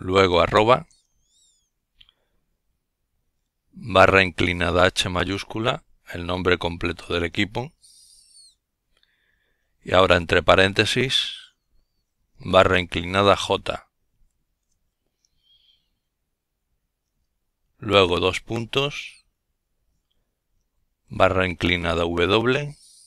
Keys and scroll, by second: 1.5 typing, 3.2 typing, 7.2 typing, 9.0-9.5 typing, 10.8 typing, 14.4 :, 17.2-18.8 typing, 21.8 typing.